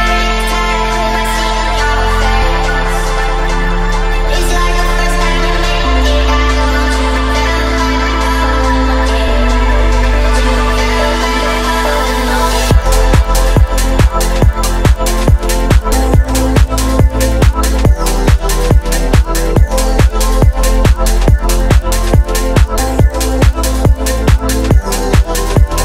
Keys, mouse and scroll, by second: 0.9 space, 2.0-3.6 drag, 5.6-9.6 drag, 10.4-11.6 drag, 13.4 click, 13.6 click, 15.0 click, 15.2 space, 16.1 space, 17.7 click, 18.5 click, 19.7 s, 20.6 right click, 22.6 click, 23.5 scroll down 1, 23.9-24.4 shift+middle drag.